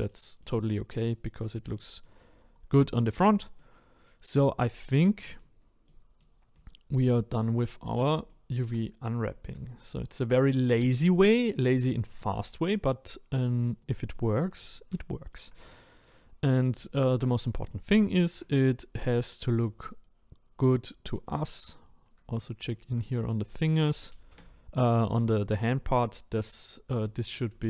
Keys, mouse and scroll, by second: 1.1-1.8 scroll down 3, 1.8 middle click, 2.4-2.8 scroll down 1, 2.8-10.7 shift+middle drag, 10.7 a, 11.2-12.7 middle drag, 12.7 click, 13.9 click, 14.1 middle click, 14.5 scroll up 4, 15.0-16.3 shift+middle drag, 16.3 scroll down 2, 16.8-19.2 shift+middle drag, 19.2-19.6 scroll up 2, 19.6-21.2 scroll down 1, 21.2-24.3 middle drag, 24.3 a.